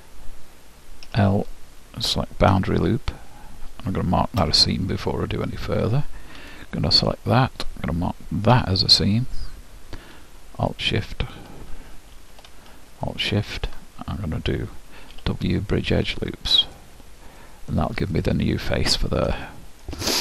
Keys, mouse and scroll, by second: 1.1 l, 2.1-4.3 middle drag, 2.6 shift+', 6.6-8.4 drag, 10.7-12.6 drag, 12.3 ctrl+z, 13.1-14.9 drag, 16.8 w, 17.5 middle click, 18.3 middle click, 18.5 middle click, 18.7 middle click, 19.5-20.2 middle drag.